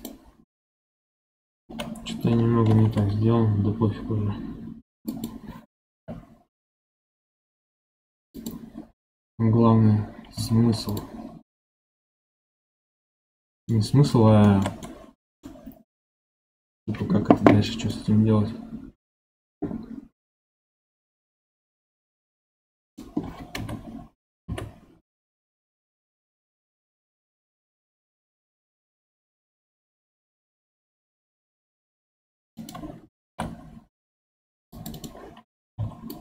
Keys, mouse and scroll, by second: 2.6 ctrl+b, 5.9 x, 10.3 2, 10.8 click, 12.9-13.2 scroll down 1, 13.2 middle click, 13.8-14.4 scroll up 2, 14.4-17.8 shift+middle drag, 17.8-20.9 middle drag, 22.1 ctrl+r, 23.5 KP_1, 24.4 KP_7, 26.6 k, 33.2 ctrl+r, 35.7 1, 36.0 click.